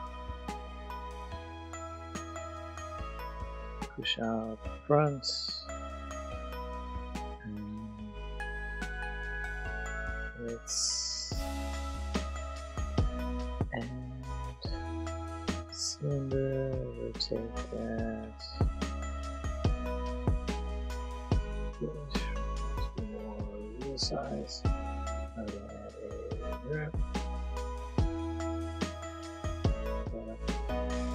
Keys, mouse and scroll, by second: 2.5 click, 3.3 ctrl+z, 3.9 click, 3.9 z, 4.0 click, 5.2 middle click, 8.9 click, 8.9 middle click, 12.3 Tab, 13.0 click, 14.4-15.0 drag, 16.6 r, 17.1 x, 18.1 y, 19.3 ctrl+click, 19.5 Tab, 19.7 middle click, 20.2 ctrl+z, 20.3 Tab, 20.6 s, 20.7 x, 21.0 click, 21.4 middle click, 21.7 s, 22.7 click, 23.0 middle click, 23.3 click, 24.0 ctrl+z, 24.7 click, 26.5 click, 26.8 Tab, 27.3 click, 27.7 a, 27.9 click, 30.5 click, 31.0 middle click.